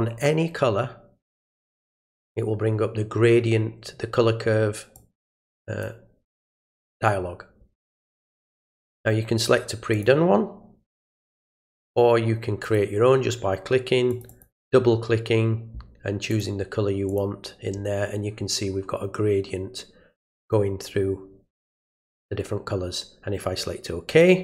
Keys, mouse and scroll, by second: 1.5 right click, 4.9 click, 9.9 click, 12.6 click, 14.1 click, 14.3 click, 16.3 click, 17.1 click, 24.1 click.